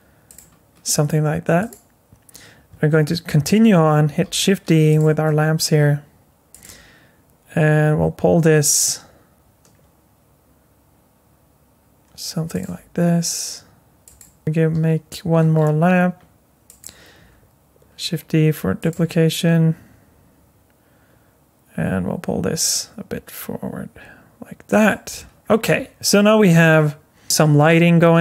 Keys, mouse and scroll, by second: 1.6 click, 4.2 shift+d, 5.2 r, 6.6 g, 12.7 r, 14.4 shift+KP_7, 14.7 shift+d, 17.2 r, 18.9 g, 25.4-26.7 scroll up 6, 26.7-27.8 scroll down 6, 27.8-28.2 scroll up 5.